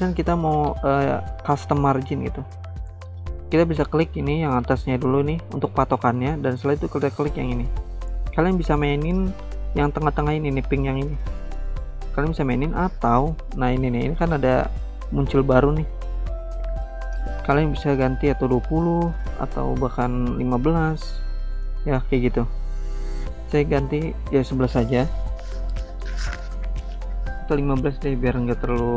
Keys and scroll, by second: 17.8-18.6 typing, 18.7 Return, 20.0-20.9 typing, 23.3-24.2 typing, 23.9 Return, 27.4-28.3 typing.